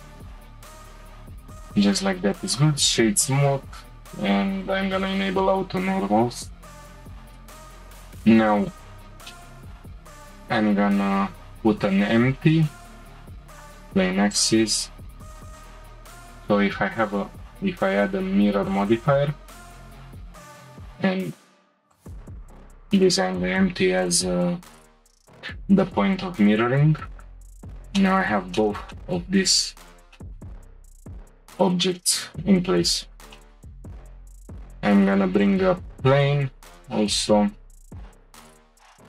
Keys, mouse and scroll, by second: 0.9-1.4 middle drag, 1.4-3.6 right drag, 3.6-4.7 drag, 5.4-7.2 shift+middle drag, 7.3 drag, 8.2-8.9 shift+middle drag, 8.9-9.3 scroll up 1, 9.3-9.9 shift+middle drag, 9.9 scroll up 1, 10.0-10.4 shift+middle drag, 10.4 scroll down 1, 10.7-11.4 shift+middle drag, 11.4 shift+a, 14.3 click, 15.5 click, 16.2-19.3 drag, 20.3 click, 23.3-24.5 scroll up 1, 24.5-26.3 scroll up 1, 28.0-29.6 shift+middle drag, 29.6-30.1 scroll up 1, 30.1-32.1 shift+middle drag, 33.4-34.0 shift+middle drag, 34.0 shift+a, 36.8-37.5 scroll down 2, 38.1 s.